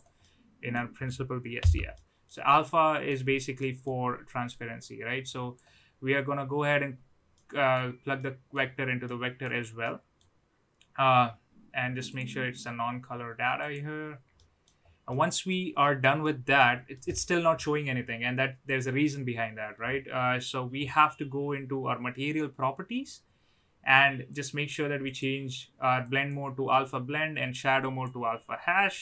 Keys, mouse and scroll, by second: 0.2 middle click, 1.5 n, 1.9 middle click, 2.7 middle click, 3.7 middle click, 4.5-5.5 drag, 7.3-7.7 middle drag, 8.1-8.5 middle drag, 9.1 middle click, 9.8-10.1 middle drag, 12.1-13.8 drag, 14.3 middle drag, 15.1-15.4 middle drag, 16.2-16.5 middle drag, 16.9 middle drag, 24.4-25.2 drag, 26.0-28.1 drag.